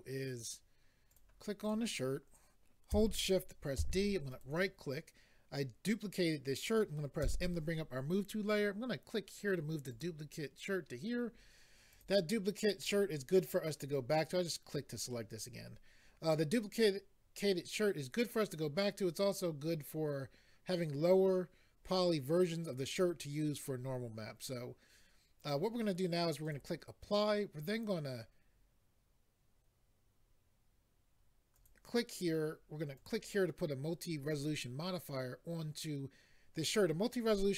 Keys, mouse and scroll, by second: 1.1 click, 1.6 click, 4.3 right click, 9.9 click, 11.9 click, 12.8 click, 26.4 click, 31.6 click, 33.0 click.